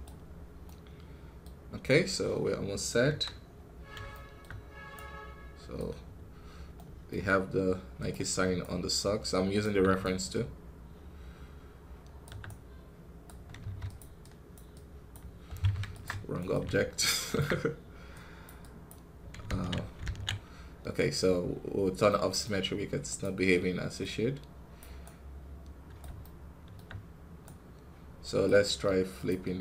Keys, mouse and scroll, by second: 0.1 scroll down 1, 0.5-3.0 middle drag, 3.0 KP_1, 3.4 scroll up 3, 4.0 shift+middle click, 4.4 scroll up 2, 4.8-7.8 right drag, 7.8 click, 8.5-13.5 shift+right drag, 13.5 f, 14.4-15.9 drag, 15.9 ctrl+Tab, 16.3-17.3 right drag, 17.3 ctrl+Tab, 18.0-19.4 drag, 19.4 ctrl+z, 19.9 ctrl+z, 22.9-24.9 drag, 24.9-26.1 right drag, 26.1-27.3 shift+middle drag, 27.3-29.0 right drag, 29.0-29.6 drag.